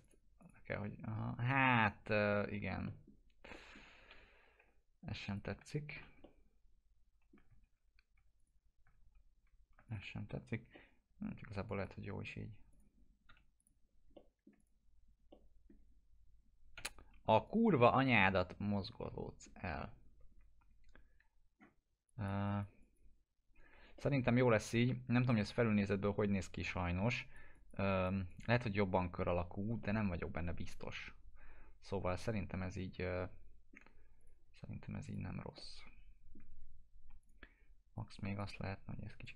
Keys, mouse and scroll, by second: 1.7 F4, 2.0 scroll down 1, 2.3-3.1 alt+middle click, 4.1 p, 5.2 click, 5.4-6.1 scroll down 2, 5.5 F4, 6.2-7.4 alt+middle drag, 7.6 ctrl+z, 8.4 click, 8.9 ctrl+z, 9.8 click, 10.7-11.3 alt+middle click, 11.6 click, 13.2 p, 13.5 click, 14.1 alt+middle click, 14.5 click, 15.3-15.9 alt+middle drag, 17.4 click, 18.6-19.6 alt+middle click, 19.6-21.5 scroll down 2, 22.0 click, 23.7 click, 23.9-24.9 alt+middle drag, 27.1 click, 29.8-33.8 alt+middle drag, 34.1 click, 35.5-36.4 alt+middle drag, 37.2 click, 38.2-39.1 typing, 39.2-39.3 drag.